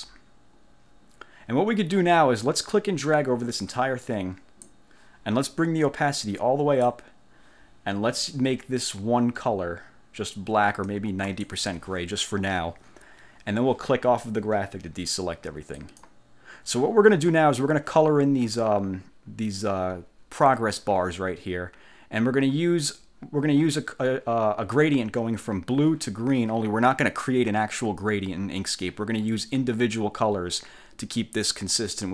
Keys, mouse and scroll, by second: 3.1-4.9 drag, 6.3 click, 11.4 click, 15.9 click.